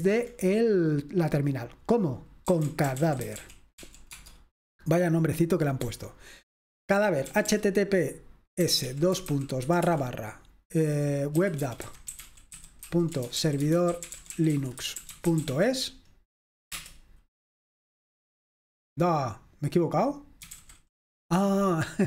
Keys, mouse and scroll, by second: 0.0 super+h, 2.3-4.3 typing, 5.6-7.3 typing, 8.4-16.0 typing, 16.9 Return, 20.2-21.1 typing.